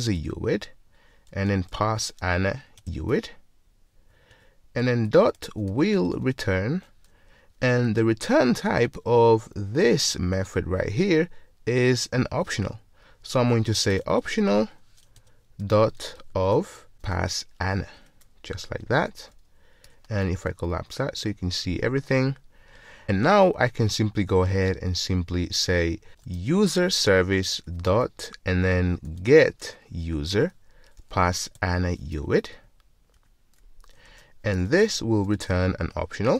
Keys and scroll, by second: 0.3 Return, 15.2 Return, 18.0 Return, 20.8 super+1, 27.0 Return, 35.0 alt+super+v.